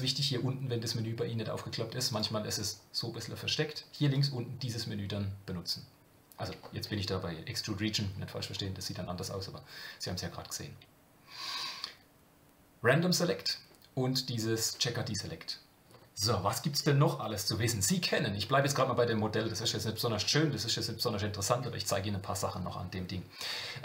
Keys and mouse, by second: 2.1 click, 4.1 click, 19.7 shift+middle click.